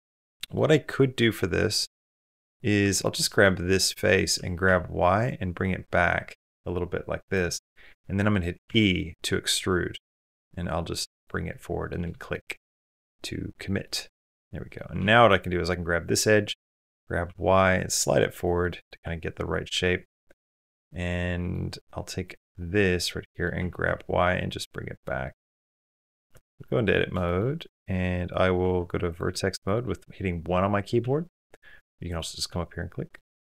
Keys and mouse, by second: 0.0 middle click, 0.7 middle click, 1.6 click, 2.6 3, 2.8 click, 3.2 middle click, 4.1 g, 7.4 shift+click, 8.0 click, 8.5 e, 11.3 middle click, 12.0 shift+middle click, 12.3 middle click, 12.7 shift+middle click, 13.0 middle click, 13.6 middle click, 14.8 2, 15.5 middle click, 17.0 g, 18.4 click, 18.8 Tab, 19.5 Tab, 20.0 middle click, 20.6 middle click, 22.4 click, 22.5 middle click, 23.6 g, 25.0 middle click, 25.6 middle click, 26.0 Tab, 26.0 middle click, 26.1 Tab, 27.0 shift+click, 28.4 1, 30.9 1, 32.3 middle click, 33.3 middle click.